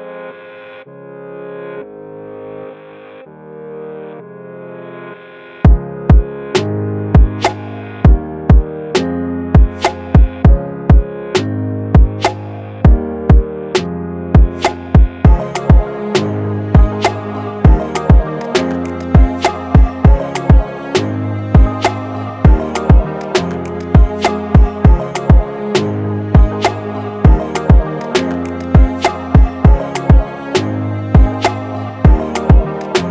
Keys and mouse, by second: 1.4-2.6 drag, 3.2-6.8 drag, 7.1-8.4 middle drag, 9.5-10.8 drag, 10.8-11.6 middle drag, 11.8-13.2 drag, 13.4-15.1 drag, 15.1 3, 20.1-21.5 drag, 22.1-23.5 drag, 26.3 space, 28.2 click, 32.0 space.